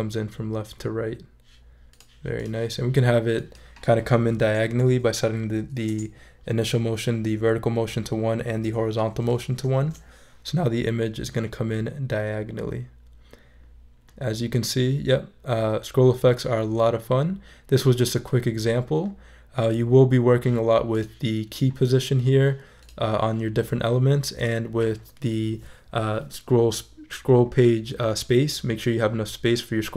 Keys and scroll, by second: 4.9 |, 5.9 Return, 9.7 shift+super+e.